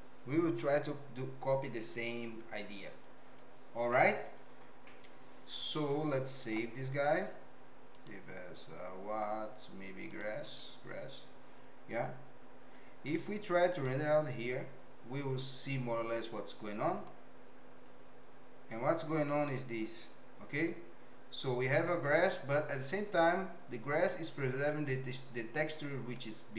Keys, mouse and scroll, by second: 6.4 ctrl+s, 13.1 z.